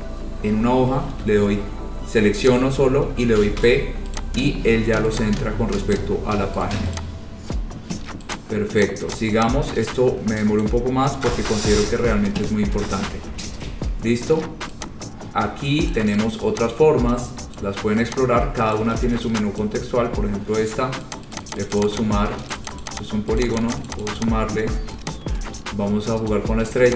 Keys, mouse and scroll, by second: 2.7 click, 3.7 p, 4.3 click, 4.8 scroll, 5.3 click, 6.8 right click, 7.1 click, 7.1 right click, 7.3-7.7 scroll, 8.5 click, 9.0 click, 9.3 click, 10.0 scroll down 4, 10.7 click, 11.5 Delete, 12.5-12.8 scroll, 16.1 click, 17.7 click, 18.9 click, 19.9-24.5 ctrl+click, 21.3 click, 21.5 click, 21.7 click, 21.7 ctrl+click, 21.9 click, 22.0 click, 22.2 click, 22.7 click, 22.9 click, 23.1 click, 23.1 click, 23.6 click, 23.8 click, 23.9 click, 24.1 click, 24.2 click, 24.3 click, 26.5 click.